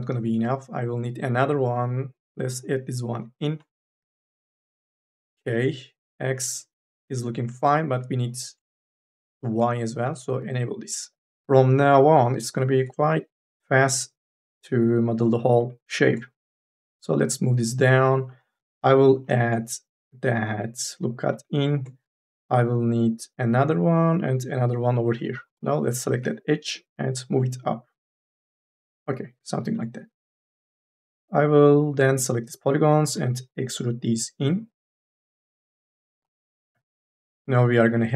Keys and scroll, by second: 11.4 e, 18.5 k, 18.8 l, 25.2 3, 25.4 e, 26.2 2, 30.0 3, 30.2 e, 32.9 d, 37.6 3, 37.8 e.